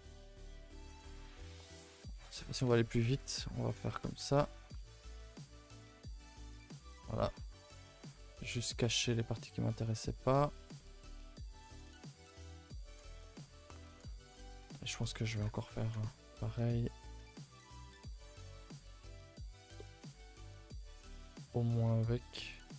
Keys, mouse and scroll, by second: 0.0-0.4 scroll up 2, 0.4 middle click, 0.8 a, 0.9 a, 1.9 alt+click, 2.2 alt+click, 3.2 ctrl+i, 3.4 h, 4.0 ctrl+r, 5.0 ctrl+r, 6.3 alt+h, 6.6 a, 6.8 a, 7.2 middle click, 8.1 a, 8.3 a, 8.5 3, 8.8 middle click, 10.1-10.7 scroll up 4, 10.4 shift+middle click, 10.8-12.9 middle drag, 12.9 scroll down 5, 13.2-14.4 middle drag, 14.4 alt+click, 15.2 ctrl+i, 15.4 h, 16.0 ctrl+z, 16.3 middle click, 16.8 alt+shift+click, 17.4 ctrl+z, 18.0 middle click, 18.7 alt+shift+click, 19.1-20.1 middle drag, 20.1 c, 21.3-22.6 middle drag, 22.6 scroll up 2.